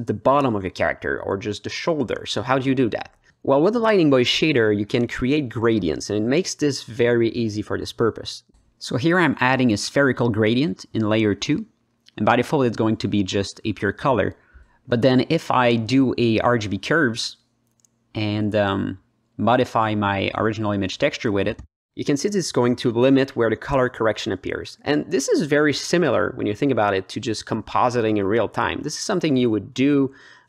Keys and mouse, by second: 0.5 click, 1.2 click, 2.3 click, 3.1 alt+middle click, 3.8 click, 4.2 shift+a, 7.4 drag, 8.4-9.1 drag, 10.7 click, 11.2 g, 13.2 click, 13.3 ctrl+drag, 13.6-14.1 alt+drag, 14.4 drag, 15.1 drag, 15.7 click, 16.3 shift+a, 20.5 middle click, 21.3 click, 21.6 ctrl+alt+middle click, 22.4-23.1 drag, 23.3 middle click, 24.1-24.9 drag, 25.2 click, 25.6 alt+middle click, 27.1 middle click, 27.4 ctrl+middle click, 27.8 click, 28.2 alt+middle click, 28.8 click, 29.3 click.